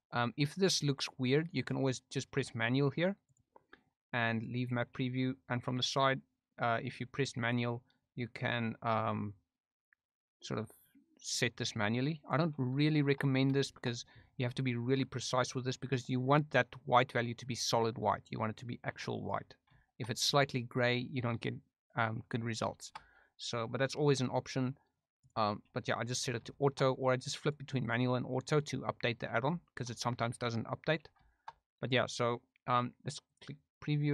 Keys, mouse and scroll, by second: 3.2 middle click, 4.3 middle click, 7.4 drag, 9.2-12.3 drag, 12.8 shift+middle click, 13.6-15.1 shift+middle drag, 15.6-19.2 drag, 19.7 shift+middle click, 22.7-25.2 shift+middle drag, 25.2 click, 26.5 shift+middle click, 27.4 click, 27.8 click, 29.6 shift+scroll up 1, 29.6 shift+middle click, 31.2 shift+scroll up 1, 31.3 shift+middle drag, 33.2 click.